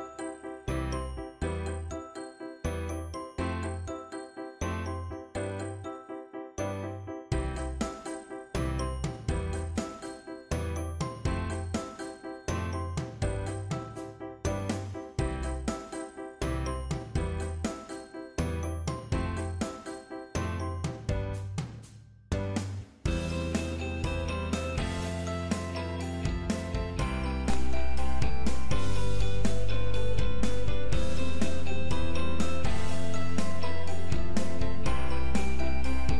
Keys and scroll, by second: 14.7 ctrl+7.